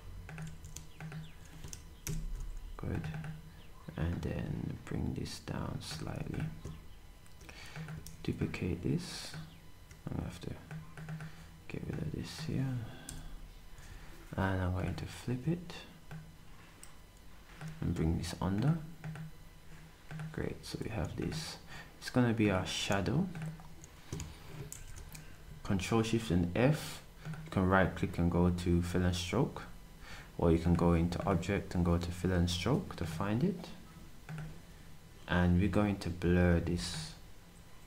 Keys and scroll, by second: 0.4 s, 5.9 s, 8.1 d, 13.0 Delete.